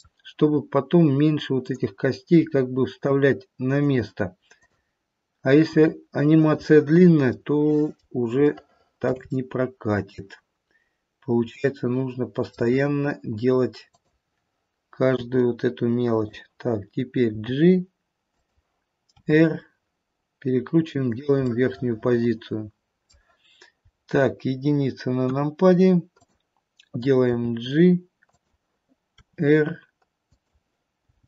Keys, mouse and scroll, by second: 0.6-1.6 scroll up 2, 1.6 click, 1.6-2.3 scroll up 1, 2.5 r, 4.5 click, 5.7 r, 7.4 middle click, 7.9 middle click, 8.5 shift+middle click, 8.7 shift+middle click, 9.2 middle click, 11.5 middle click, 12.8-13.8 scroll down 2, 13.8 click, 15.0 r, 17.2 g, 19.1 r, 21.5 middle click, 23.9-24.5 scroll down 3, 25.3 KP_1, 26.2 click, 27.3 g, 29.1 r, 30.9 g.